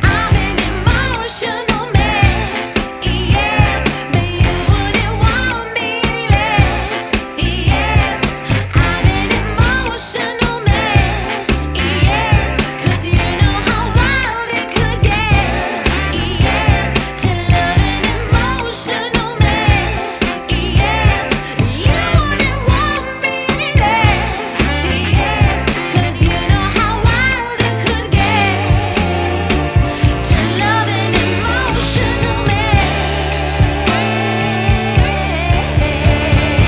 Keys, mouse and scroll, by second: 0.7 click, 5.3 click, 8.8 click, 11.8 click, 16.6-17.1 scroll up 2, 17.1 scroll down 2, 17.3-18.8 scroll up 1, 18.8 click, 20.8 click, 25.9-27.2 scroll up 1, 27.2 click, 28.9 click, 31.7 click, 33.3 click.